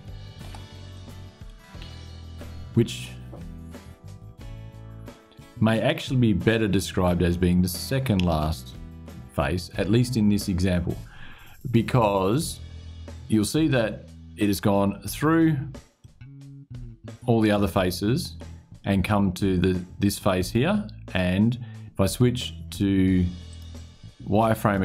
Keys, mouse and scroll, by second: 0.6 shift+click, 13.0-14.3 drag, 15.7-18.3 middle drag, 23.2 click, 24.3 click.